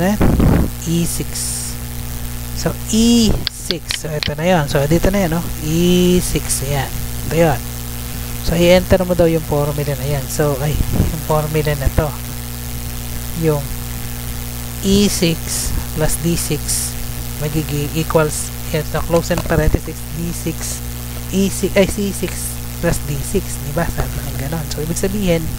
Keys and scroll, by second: 0.0 Tab, 2.1 Tab, 4.6 Left, 5.6 Right, 9.2 F2, 9.8 ctrl+v, 10.7 ctrl+z, 11.4 Tab, 11.8 ctrl+c, 12.3 Tab, 13.1 ctrl+v.